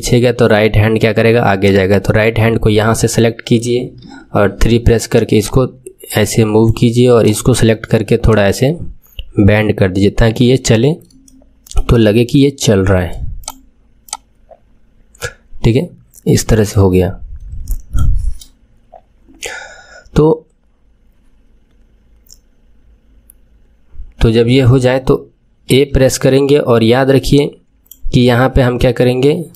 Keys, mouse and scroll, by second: 0.0-1.5 middle drag, 1.5 click, 3.9 KP_3, 5.3 click, 7.1 click, 8.2 click, 11.2-13.3 shift+middle drag, 13.3-17.1 drag, 17.2-17.6 scroll down 1, 17.6-20.6 shift+middle drag, 25.7 a, 27.3-29.5 drag.